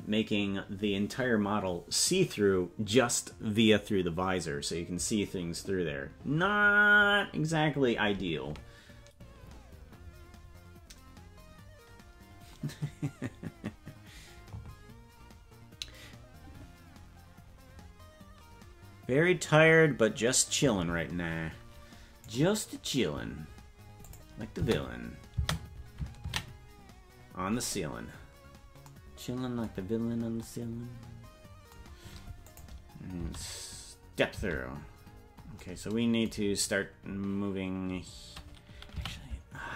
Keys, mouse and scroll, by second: 22.4 right click, 24.0 click, 24.5 space, 28.9 ctrl+s, 30.0-30.4 scroll up 3, 32.4 click, 33.1 space, 35.4 space, 39.0 a.